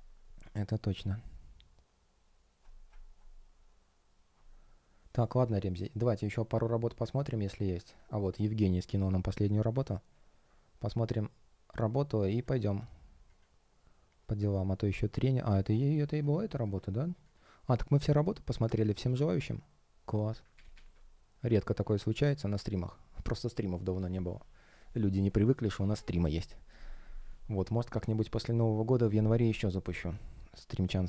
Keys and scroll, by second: 20.5 super+w, 21.6 super+w.